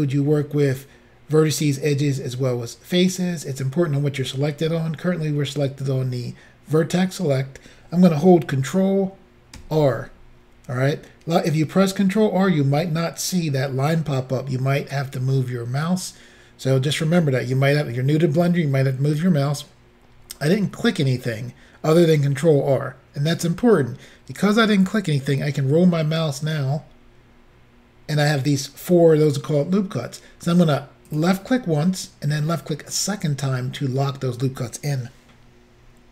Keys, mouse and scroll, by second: 9.6 ctrl+r, 26.8 scroll up 1, 27.4 scroll up 2, 31.2 click, 32.9 click.